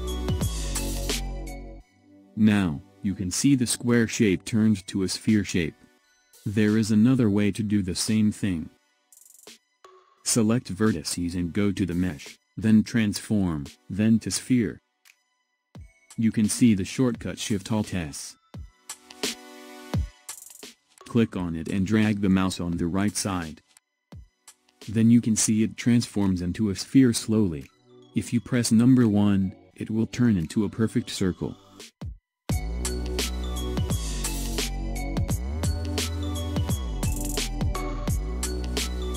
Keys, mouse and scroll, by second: 9.0 ctrl+z, 11.9-15.0 drag, 30.6 click, 32.9 ctrl+z, 33.8 ctrl+z, 36.9 alt+shift+s.